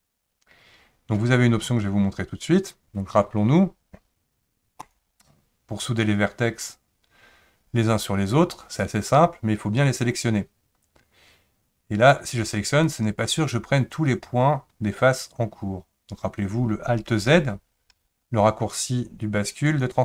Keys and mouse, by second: 4.8 click, 12.1 click, 17.4 alt+z, 17.9 alt+z, 19.7 click.